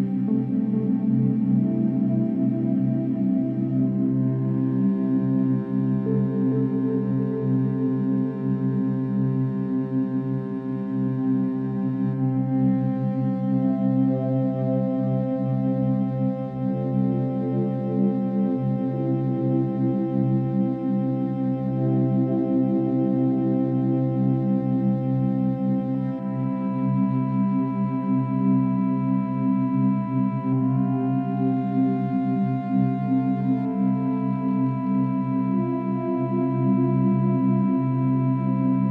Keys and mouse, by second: 2.6 space, 5.2-8.1 drag, 8.8 space, 9.6 click, 10.1-11.3 drag, 13.2 click, 13.7 space, 15.0 click, 16.3 click, 16.7-18.9 drag, 21.0 Left, 21.3 Left, 21.9 Left, 24.9-29.2 drag, 29.3-35.4 drag, 35.4 Delete, 36.0 click, 36.9 Delete, 38.1 ctrl+z, 38.6 click.